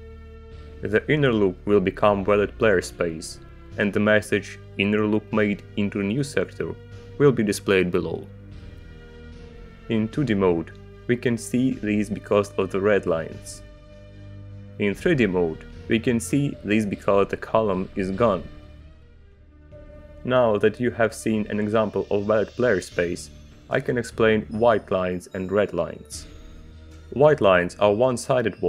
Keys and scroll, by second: 19.8 Return, 23.5 ctrl+z, 24.5 Return, 26.4 ctrl+shift+z.